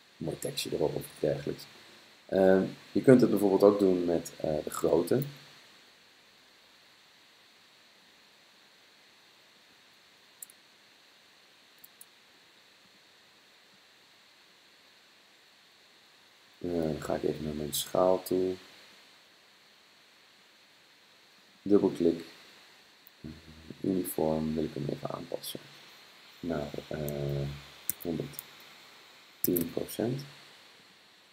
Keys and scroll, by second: 27.9 1, 29.3-30.1 typing.